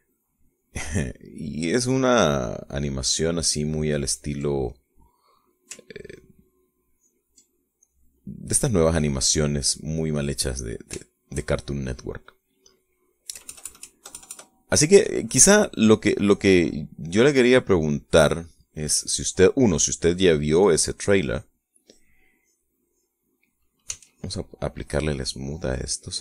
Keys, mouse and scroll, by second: 2.6-4.5 ctrl+drag, 4.8 ctrl+click, 5.8 ctrl+middle click, 7.0 ctrl+click, 7.9 ctrl+click, 9.0 ctrl+click, 9.7 click, 10.9-12.1 middle drag, 12.2-13.5 shift+middle drag, 14.5 KP_Add, 16.6 click, 17.4 click, 18.1-19.5 middle drag, 20.2 click, 21.1 click, 21.8 click, 22.4 click, 22.9 click, 23.5 click, 24.1 click, 25.1 s, 25.3 click, 25.9 click.